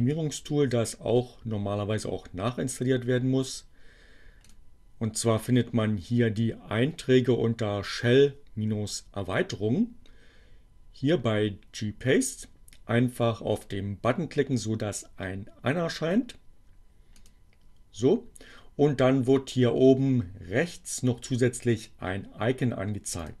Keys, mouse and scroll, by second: 4.1 click, 13.3 click, 16.6 click, 18.0-18.3 scroll down 1, 20.2-23.4 drag.